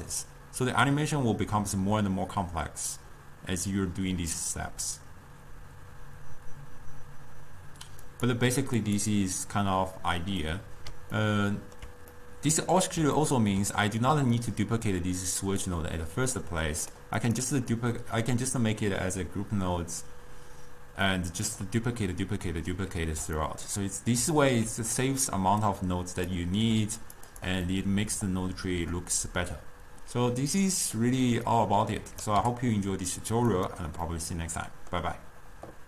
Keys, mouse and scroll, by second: 8.4-10.5 drag, 10.5-12.2 middle drag, 12.2-13.3 scroll down 2, 13.3-14.6 ctrl+middle drag, 14.6 click, 16.2-17.4 drag, 17.8-20.9 middle drag, 21.1-25.8 middle drag, 25.8-26.7 drag, 26.7 g, 27.4 click, 27.8-30.9 middle drag, 31.6 click, 32.4 g, 34.1-35.8 middle drag.